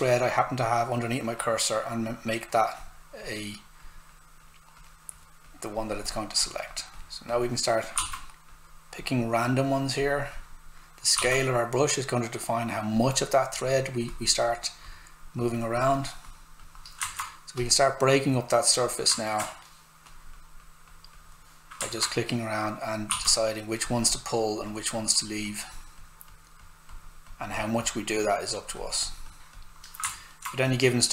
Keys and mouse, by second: 7.9 s, 8.0 click, 11.1 s, 17.0 alt+click, 17.0 alt+right click, 17.6 click, 19.2 alt+right click, 20.0 click, 21.9 alt+right click, 23.1 s, 23.1 click, 30.1 alt+right click, 30.6 click.